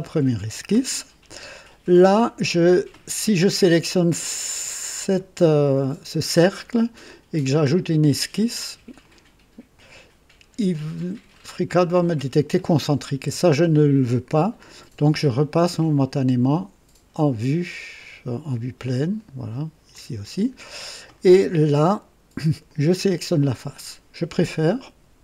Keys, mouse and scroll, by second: 4.9 click, 9.0 click, 9.7 click, 11.3 click, 13.1 Escape, 15.9 click, 17.9 click, 19.1 click, 19.9 click, 22.6 click.